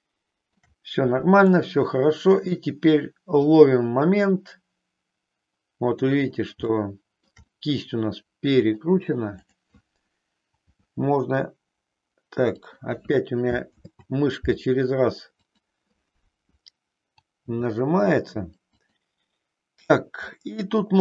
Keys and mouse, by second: 1.4-6.1 middle drag, 6.7 shift+middle click, 7.5-8.9 middle drag, 9.3 click, 10.6 g, 13.6 ctrl+z, 15.4 click, 17.4 g, 20.4-21.0 middle drag.